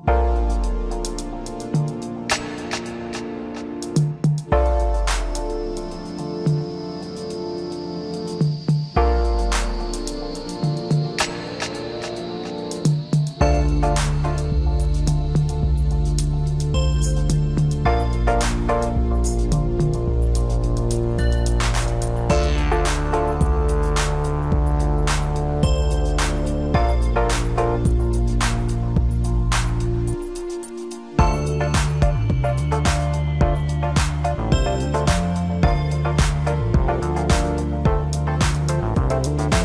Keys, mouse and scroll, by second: 0.5 e, 2.6 s, 4.7 scroll up 3, 4.9-5.2 scroll down 3, 5.2 middle click, 6.0 scroll down 3, 6.3-9.0 middle drag, 9.0 Tab, 10.0 KP_Divide, 11.5-12.8 middle drag, 12.8 KP_1, 14.5 s, 16.8 g, 19.7 KP_3, 21.1 g, 25.0-25.9 middle drag, 25.9 scroll up 1, 26.1 middle click, 26.8 scroll up 1, 27.5-27.8 scroll up 1, 27.9 g, 29.8 scroll down 1, 30.3 g, 33.0-33.3 scroll up 1, 33.3-35.0 middle drag, 35.0 KP_1, 37.2 s.